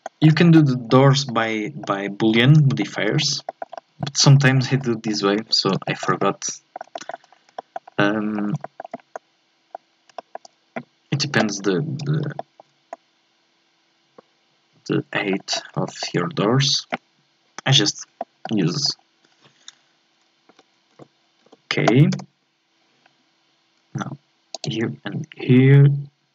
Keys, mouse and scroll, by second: 0.2 scroll up 1, 0.4 scroll down 1, 0.5-2.3 middle drag, 2.3-2.8 scroll down 4, 2.8 shift+middle click, 3.1-3.5 scroll up 3, 3.5 shift+middle click, 4.2 scroll up 2, 4.4 shift+middle click, 4.7 scroll up 1, 4.8 middle click, 5.4 Tab, 5.9-7.3 shift+middle drag, 7.3 scroll down 3, 7.6 shift+middle click, 7.8 scroll up 3, 8.0 middle click, 8.9 scroll up 2, 9.1 middle click, 9.8 scroll down 3, 10.1-11.9 shift+middle drag, 11.9-12.4 scroll up 2, 12.4 shift+middle click, 12.7 scroll down 1, 12.9-15.5 middle drag, 15.5-15.9 scroll down 1, 15.9-17.7 shift+middle drag, 17.7-18.2 scroll up 1, 18.2 middle click, 18.6-20.5 scroll down 2, 20.5 a, 20.9 a, 21.4 a, 22.1 k, 23.0-26.1 scroll up 1.